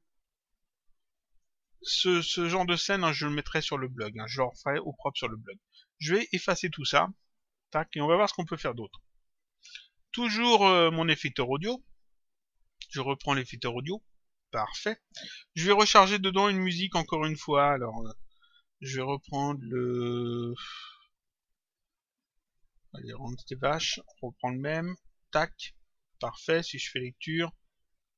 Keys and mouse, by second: 0.3 click, 4.0 click, 6.0 click, 7.3 click, 8.7 click, 10.7 click, 14.0 click, 17.4 click, 20.6 click, 22.4 click, 27.2 click.